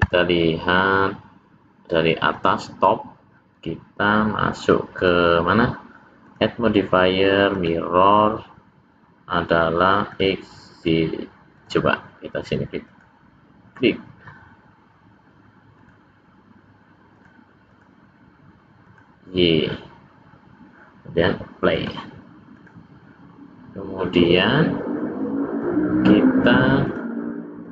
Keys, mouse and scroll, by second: 5.0 click, 6.2 click, 10.4 click, 11.3 click, 11.6 click, 16.0 click, 17.2 click, 17.7 click, 18.9 click, 21.8 click, 23.6 scroll down 1, 23.8-24.5 scroll up 1, 24.5 scroll down 1, 26.8 click, 27.6 click.